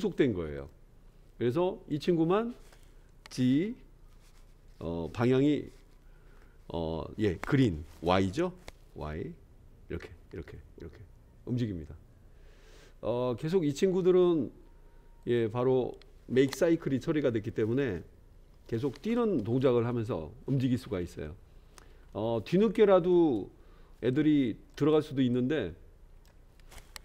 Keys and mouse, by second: 0.5 click, 1.9 click, 3.5 g, 21.2-21.7 middle drag, 22.1-23.1 shift+middle drag, 24.1-24.7 drag, 25.4-26.3 shift+drag.